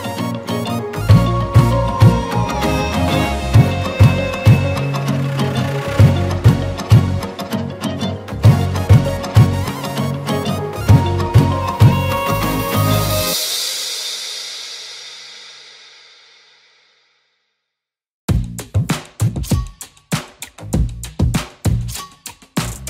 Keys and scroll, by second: 1.5 e, 1.7 b, 6.4 ctrl+z, 8.6 ctrl+z, 10.0 e, 10.7 ctrl+z, 11.3 e, 11.7 ctrl+z, 11.8 c, 12.6 ctrl+z, 14.5 ctrl+z, 18.2 ctrl+z, 19.0 ctrl+z, 19.5 ctrl+z, 20.1 ctrl+z, 21.0 ctrl+z.